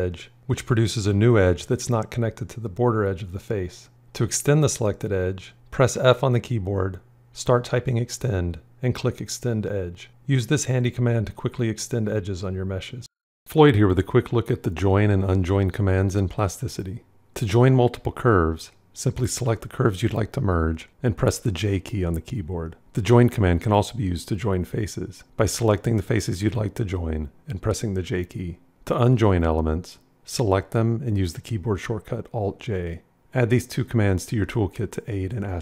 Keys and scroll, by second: 5.4 f, 22.1 j, 27.7 j, 31.9 alt+j.